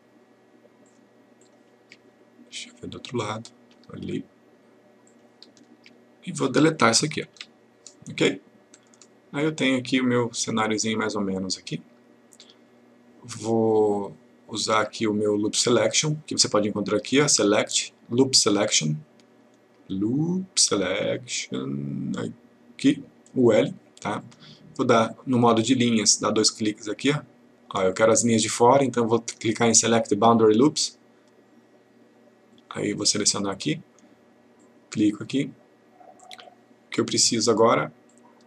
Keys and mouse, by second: 5.1 shift+click, 7.3 Delete, 8.8-10.7 click, 12.8-14.0 click, 17.1 click, 24.2 click, 30.7 click, 32.6 click, 34.6 click.